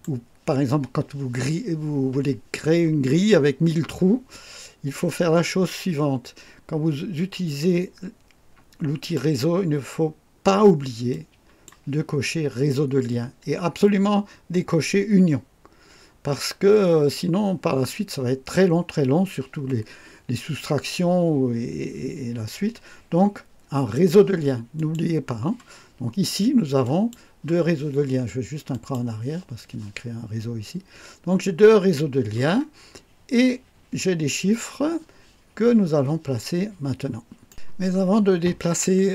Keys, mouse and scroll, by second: 8.9 click, 11.0-11.8 drag, 24.7 click, 26.8 click, 28.7 click, 32.9-33.2 scroll up 1, 38.5 scroll down 2.